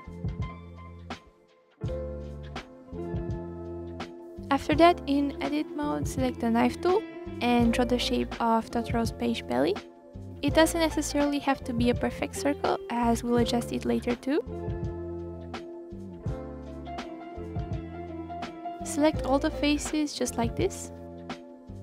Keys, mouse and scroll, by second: 0.4 click, 0.9 click, 1.7-2.9 drag, 3.6 click, 5.1 middle click, 6.4 click, 6.6-7.1 scroll down 3, 7.1-7.7 scroll up 3, 7.7-11.3 drag, 12.8-13.4 scroll down 6, 13.4-15.5 scroll up 12, 18.6 click, 18.7 scroll down 2, 18.9-19.5 scroll up 1, 19.5 click, 20.1 shift+click, 20.3 shift+click, 20.5 shift+click, 21.0 shift+click, 21.2 scroll down 4, 21.3-21.8 scroll up 1.